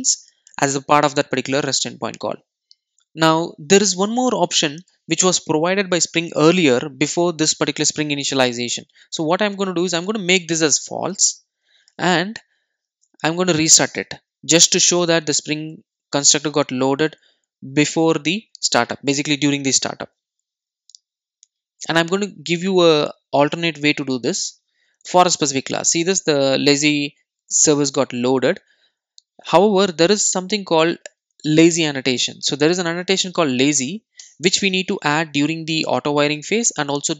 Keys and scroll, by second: 14.1 super+r, 34.2 Return.